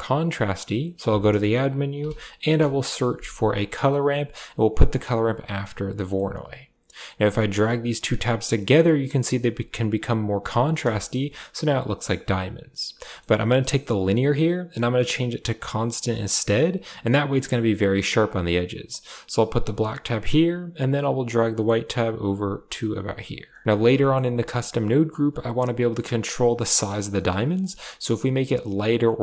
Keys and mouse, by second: 0.6 middle click, 1.0 shift+a, 5.1 click, 5.8 middle click, 7.3-7.9 drag, 8.4-9.1 drag, 10.2 click, 10.8 shift+middle click, 12.9 middle click, 13.8-16.3 drag, 18.9-19.5 drag, 21.1-23.1 drag, 23.9 shift+middle click, 24.9-27.0 drag, 27.6 click, 28.3-29.2 drag.